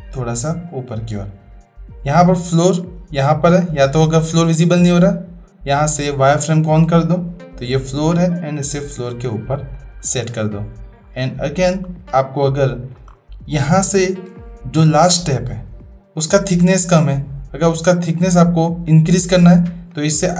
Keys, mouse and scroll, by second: 3.6-6.1 drag, 6.8-9.1 drag, 10.3-11.0 middle drag, 11.3-11.6 shift+middle drag, 12.2-12.9 shift+drag, 14.4-14.8 shift+drag.